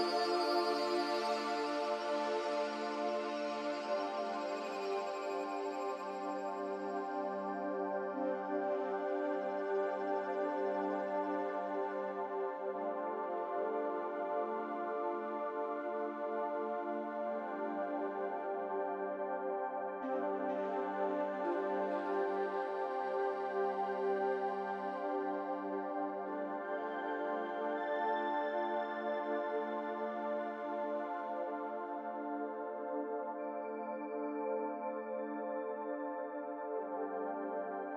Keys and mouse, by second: 0.1 click, 1.8 shift+a, 6.5 s, 9.1 g, 10.4 g, 16.0 g, 19.0 s, 21.0 g, 23.5 s, 24.6 g, 26.0 s, 28.6 click, 30.3 1, 31.3 Tab, 32.0 1, 32.8 click, 34.6 middle click, 35.9 click, 36.8 g.